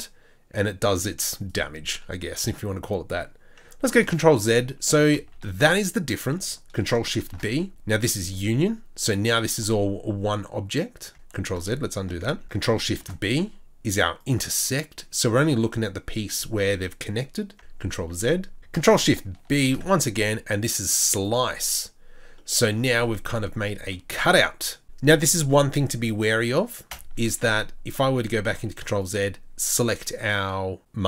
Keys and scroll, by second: 4.2 ctrl+z, 5.2 ctrl+z, 9.6 Tab, 11.1 ctrl+Tab, 11.4 ctrl+z, 12.3 ctrl+z, 12.4 ctrl+z, 18.1 ctrl+z, 19.5 ctrl+z, 26.9 z, 28.2 ctrl+z.